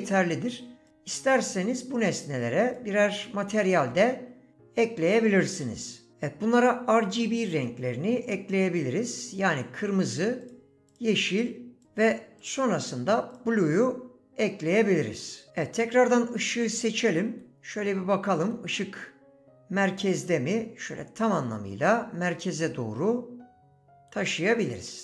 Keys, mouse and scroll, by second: 2.7 click, 3.7 click, 10.4 click, 11.0 click, 12.4 click, 13.7 click.